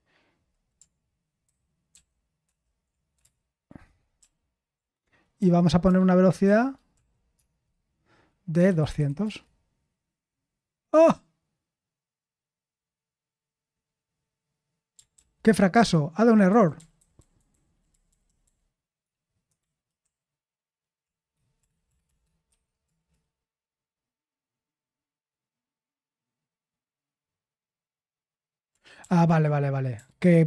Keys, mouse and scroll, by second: 1.4-2.4 ctrl+_, 3.1 ctrl+c, 4.2 ctrl+`, 5.4 p, 6.4-9.7 typing, 17.5 Left, 17.7-20.7 Left, 20.7-21.6 Right, 21.6 BackSpace, 21.8 BackSpace, 22.0 BackSpace, 22.5 1, 22.8 Return.